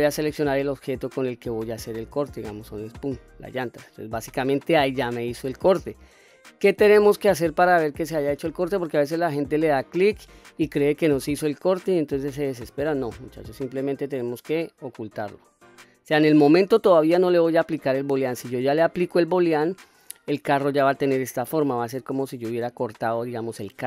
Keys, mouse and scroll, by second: 1.2 click, 5.1-7.9 middle drag, 10.6-12.4 middle drag, 15.1 click, 15.7-16.9 middle drag.